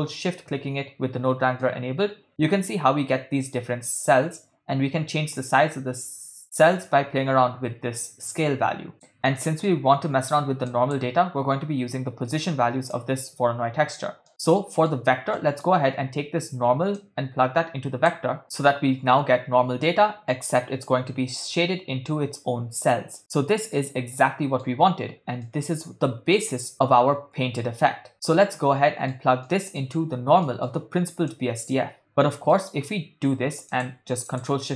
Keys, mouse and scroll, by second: 1.6-2.4 ctrl+middle drag, 4.4-9.1 drag, 9.4-9.8 middle drag, 10.7 click, 13.0-14.0 drag, 14.3 middle click, 14.5 ctrl+middle click, 15.4 middle click, 17.0-18.4 drag, 23.7-24.7 middle drag, 25.4-26.4 middle drag, 26.7-29.1 middle drag, 29.4 middle click, 30.4 middle click, 31.3-32.1 drag, 32.5 middle click, 33.7 click, 34.6 ctrl+shift+click.